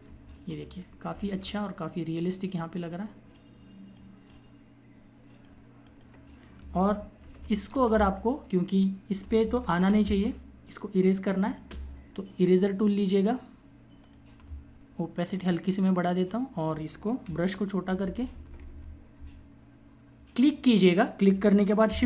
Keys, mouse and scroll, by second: 0.9 typing, 6.7 ctrl+=, 7.2 space, 9.5 ctrl+=, 9.7 space, 9.9 click, 10.2 space, 11.6 click, 17.0-19.0 typing, 20.3 click.